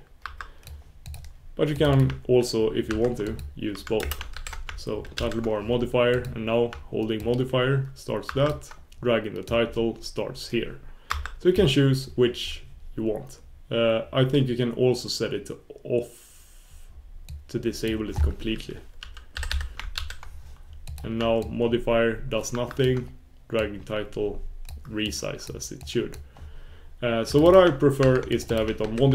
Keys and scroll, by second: 3.4 super+s, 6.1 super+s, 10.1 super+s, 10.4 super+s, 17.3 super+s, 19.4 super+s, 25.5 super+s.